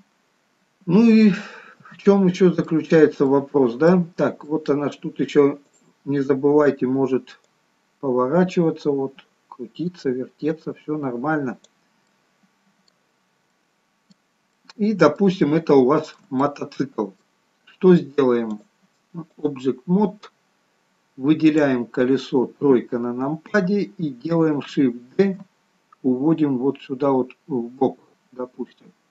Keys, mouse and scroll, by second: 0.1-0.8 scroll up 3, 0.8-1.5 scroll down 1, 1.6 shift+middle click, 2.3 middle click, 3.5 middle click, 4.4 scroll down 3, 4.7 middle click, 5.9 click, 7.6 click, 12.3 middle click, 13.5 scroll up 3, 13.8 middle click, 15.6 shift+middle click, 15.9 shift+middle click, 16.6 middle click, 19.6 click, 22.9 KP_3, 25.4 shift+d.